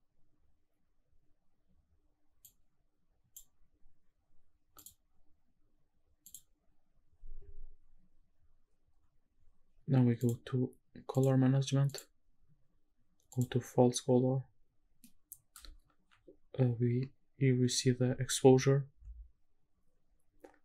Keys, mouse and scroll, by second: 0.1-1.1 scroll up 1, 2.4-3.4 drag, 4.8 click, 5.9-6.4 scroll down 1, 6.6 click, 6.6-8.6 scroll down 1, 10.2 click, 11.2 click, 11.9-13.6 drag, 15.0 middle click.